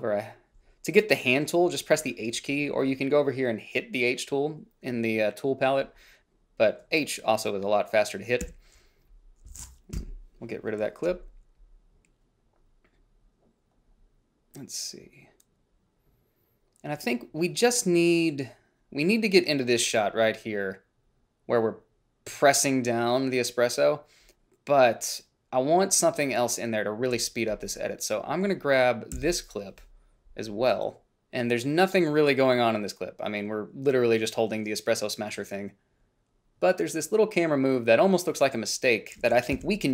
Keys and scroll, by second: 8.6 a, 10.2 Delete, 29.4 f, 39.8 i.